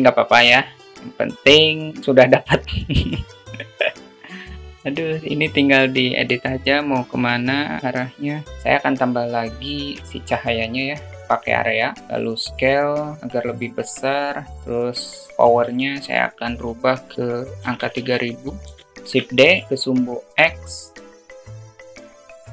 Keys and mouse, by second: 4.7 click, 5.8-7.8 drag, 8.5 shift+a, 9.6 shift+a, 15.3-18.9 drag, 17.9 0, 19.1 shift+d, 21.1-22.3 drag.